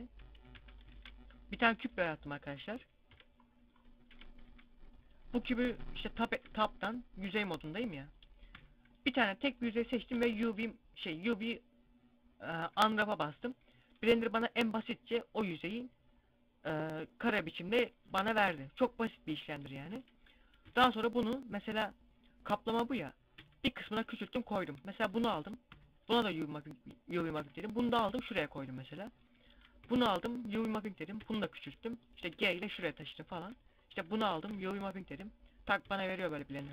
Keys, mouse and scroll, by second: 0.4 scroll down 4, 0.4 x, 0.8 shift+a, 1.8 scroll down 4, 2.2 middle click, 3.0 KP_5, 3.6 scroll up 1, 4.0 KP_5, 4.4 KP_Decimal, 5.5 Tab, 5.7 scroll down 2, 6.4 z, 7.4 right click, 8.5 u, 9.5 middle click, 10.0 u, 13.1-13.5 scroll up 3, 19.5 a, 20.2 a, 21.6 scroll up 1, 23.2 s, 23.7 click, 23.8 g, 24.4 click, 24.7 right click, 25.5 u, 27.1 s, 27.8 click, 27.8 g, 28.3 click, 28.9 right click, 29.7 u, 31.0 s, 31.5 click, 32.2 g, 32.8 click, 33.3 z, 33.6 right click, 34.3 u, 35.7 z, 36.5 a.